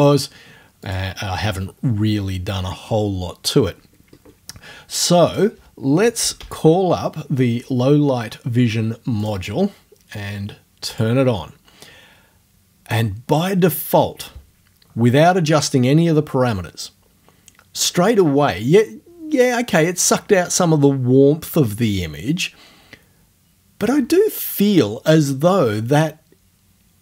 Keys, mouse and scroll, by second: 0.9 click, 1.7-4.1 middle drag, 5.3 click, 6.0-7.2 typing, 9.3 click, 10.9 click.